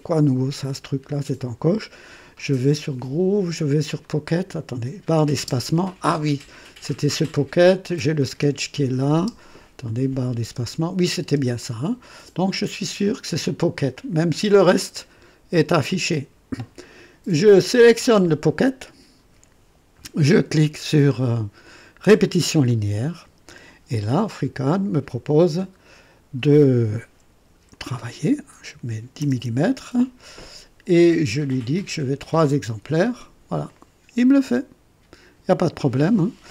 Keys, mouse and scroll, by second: 4.0 click, 5.3 space, 7.2 click, 8.3 space, 9.1 space, 9.8 click, 10.4 space, 11.1 space, 11.6 click, 12.5 space, 13.9 click, 14.6 space, 17.7 click, 22.2 click, 27.7 click, 28.7 KP_1, 29.2 KP_0, 31.3 scroll up 1, 33.6-36.5 drag.